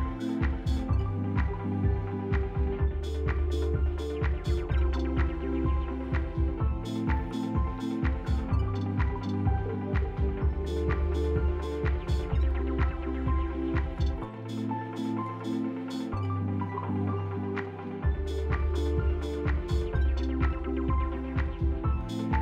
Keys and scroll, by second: 4.0 F3, 4.8 t, 5.7 F3, 12.0 f, 12.2 F3.